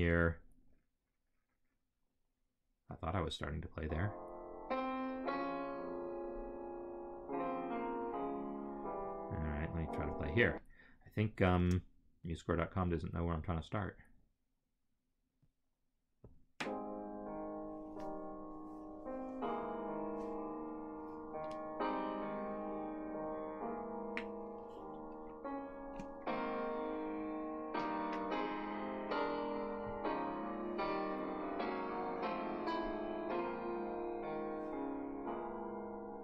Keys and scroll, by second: 10.1 space, 11.5 space.